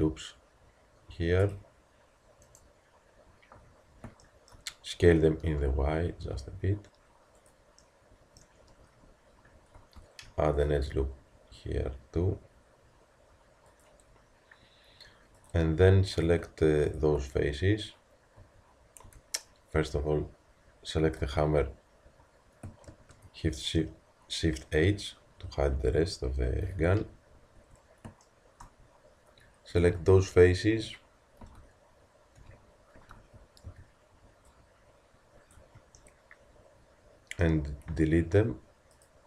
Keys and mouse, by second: 5.0 s, 10.0 ctrl+r, 15.4-18.7 drag, 17.4 z, 18.4 a, 19.1 Tab, 21.2 z, 22.9 shift+h, 26.9 KP_3, 27.6 Tab, 31.4 z, 37.9 x.